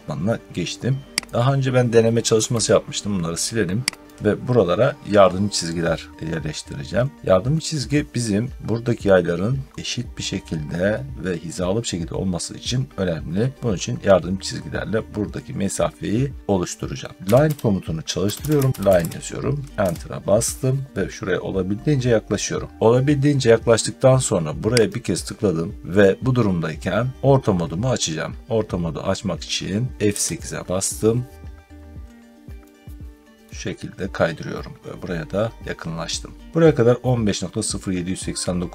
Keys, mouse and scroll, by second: 1.2 click, 2.2 Delete, 3.9 click, 4.1 Delete, 6.8 middle click, 6.8 middle click, 9.7 middle click, 12.5 middle click, 12.6 middle click, 16.9-19.3 typing, 18.4 Caps_Lock, 19.7 Return, 20.9 middle click, 21.0 middle click, 21.4-22.1 typing, 24.8 click, 30.0 F8, 31.3 middle click, 31.4-31.9 scroll down 2, 33.3 middle click, 34.6 middle click, 34.9 middle click, 38.2 scroll.